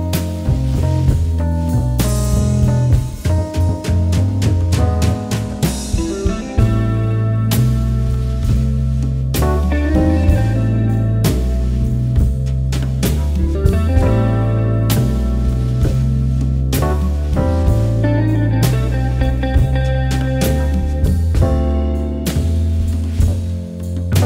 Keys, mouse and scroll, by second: 0.4 click, 1.5 right click, 1.8 click, 2.3 ctrl+z, 2.6-4.9 drag, 4.9 ctrl+z, 5.6 alt+scroll up 1, 5.7 alt+click, 6.1-8.9 alt+drag, 8.9 click, 9.4 click, 10.2 click, 10.7-12.5 drag, 12.5 click, 13.0 alt+scroll down 1, 13.4 alt+scroll up 1, 13.6-14.9 drag, 14.9 click, 15.5 right click, 16.1 shift+click, 16.7 alt+space, 16.8-17.3 scroll down 3, 17.0 alt+click, 17.3 click, 17.4 space, 17.7 alt+scroll down 1, 17.8 alt+click, 18.8 space, 19.4 click, 19.5 right click, 20.0 r, 20.3 ctrl+z, 20.7 click, 22.0 click, 22.5 ctrl+d, 23.0 ctrl+z, 23.0 alt+scroll down 2, 23.9 l.